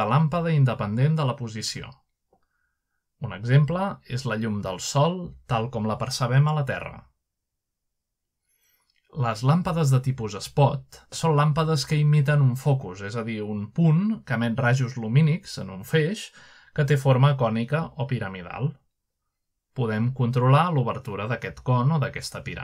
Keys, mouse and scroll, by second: 0.4 r, 0.7 z, 3.0 click, 3.4 g, 5.7 click, 6.1-6.5 middle drag, 6.5-7.2 middle drag, 6.8 g, 8.0 click, 8.5 typing, 10.3 click, 12.3 click, 13.8 click, 16.4-17.1 middle drag, 17.1 click, 17.7 click, 17.8-18.2 middle drag, 18.7-19.5 middle drag, 18.7-19.4 typing, 21.1 click.